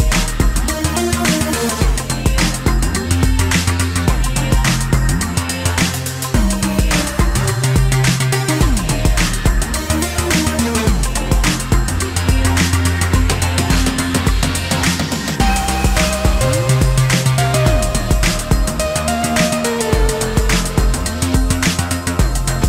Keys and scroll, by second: 15.4 space, 15.5 Escape.